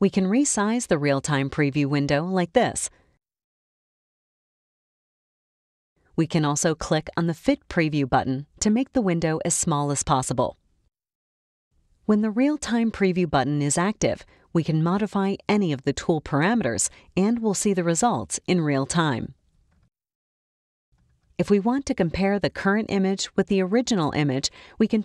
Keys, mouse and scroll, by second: 2.0-5.5 drag, 8.9 click, 14.4 click, 15.5-21.4 drag.